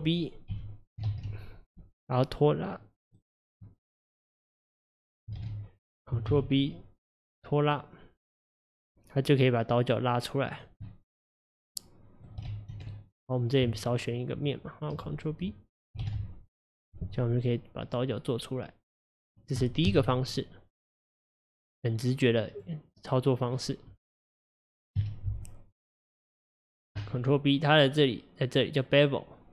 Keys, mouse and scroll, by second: 0.5 KP_1, 1.1 ctrl+b, 5.3 ctrl+z, 6.3 ctrl+b, 10.9-12.5 middle drag, 12.5 ctrl+z, 13.0 middle click, 13.9 shift+click, 16.0 ctrl+b, 19.9 KP_1, 22.5 click, 25.0 KP_Divide, 25.9-29.0 middle drag.